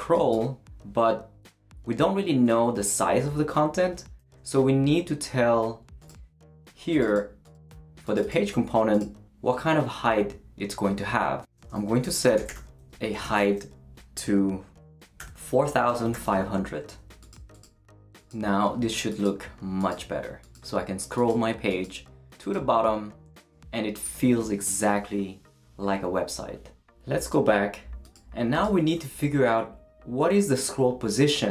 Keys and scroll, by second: 11.8-13.7 typing, 15.2-16.6 typing.